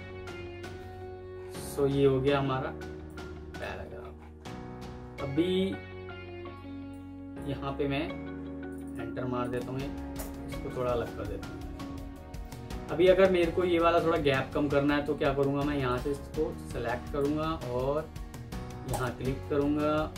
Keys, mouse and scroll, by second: 1.2 alt+scroll up 1, 2.0 alt+scroll down 1, 5.3-6.3 alt+scroll up 1, 7.4 Escape, 8.7 double click, 10.0 Return.